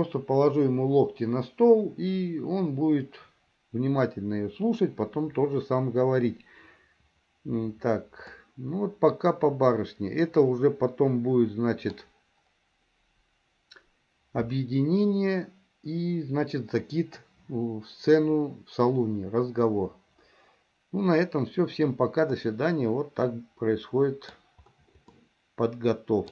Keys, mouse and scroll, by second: 8.6-12.2 middle drag, 22.4-24.5 middle drag, 25.3-26.3 middle drag.